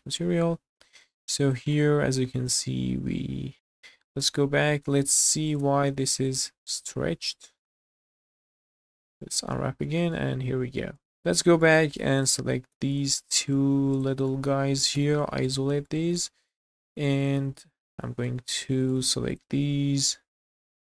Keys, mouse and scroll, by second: 0.6 scroll up 2, 1.0 shift+middle drag, 1.5 click, 1.8-3.8 middle drag, 3.5 ctrl+a, 4.2 /, 5.1 middle drag, 5.5 click, 5.6 Tab, 6.1-6.6 scroll up 3, 6.5 shift+middle click, 6.8 scroll down 2, 7.2 a, 7.4 middle click, 7.9 u, 8.8 click, 9.2 middle click, 9.7 scroll down 1, 10.0 shift+middle click, 10.3 middle click, 11.0 Tab, 11.1 /, 11.2-11.5 scroll down 2, 11.6 shift+middle click, 12.0 Tab, 12.2 click, 12.7 Tab, 13.0 click, 13.2 middle drag, 13.9 shift+click, 14.3 middle click, 14.9 /, 15.8-16.2 shift+middle drag, 16.4 click, 16.7-17.2 scroll up 1, 17.2 click, 17.4 Tab, 17.7 scroll up 2, 18.0 shift+middle click, 18.4 scroll up 2, 18.8 shift+middle click, 19.3 alt+click, 20.4 middle click.